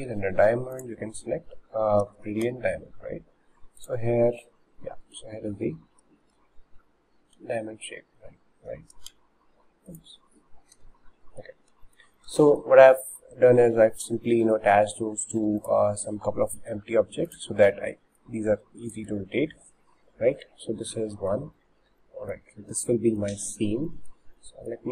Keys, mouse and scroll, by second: 1.1 scroll down 5, 2.5 g, 4.4-5.4 middle drag, 5.4 scroll up 4, 6.4 g, 7.4 r, 9.1 g, 10.8 Delete, 11.5 scroll up 2, 11.9-13.6 shift+middle drag, 13.6 scroll up 1, 14.3 scroll up 5, 14.3-15.6 shift+middle drag, 15.6-19.1 drag, 19.1 ctrl+z, 20.4-21.4 middle drag, 21.4-21.8 scroll down 3, 22.1 middle click, 22.4-22.7 scroll down 2, 22.7 middle click, 23.3-23.9 scroll up 1, 23.9-24.9 shift+middle drag.